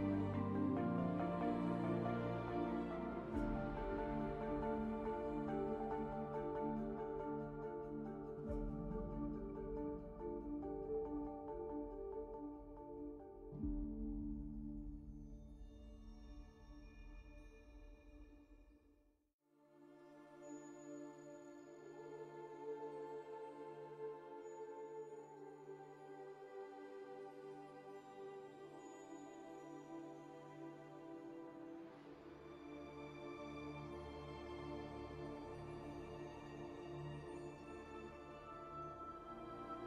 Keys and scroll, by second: 18.5 q, 20.8 alt+a, 21.6 z, 23.8 q, 27.9 q, 29.6 alt+a, 31.4 q, 36.2 alt+a, 39.6 `.